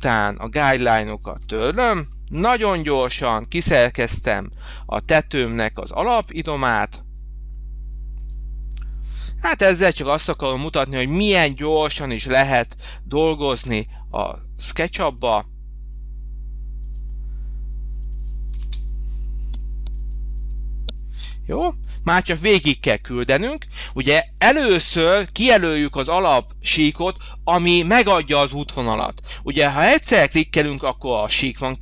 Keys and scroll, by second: 1.3 Delete, 2.5 Delete, 18.5 space, 21.1 Delete.